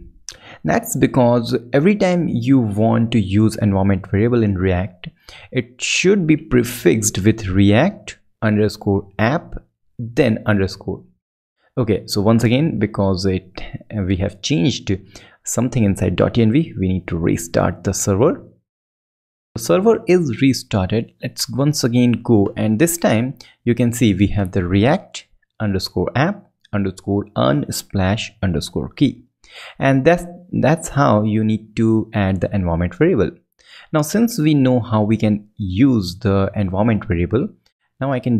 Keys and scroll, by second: 1.9 Left, 16.3 ctrl+Up, 19.5 ctrl+shift+super+Left, 36.8 ctrl+alt+super+Left, 37.5 alt+super+Left, 37.9 super+Right.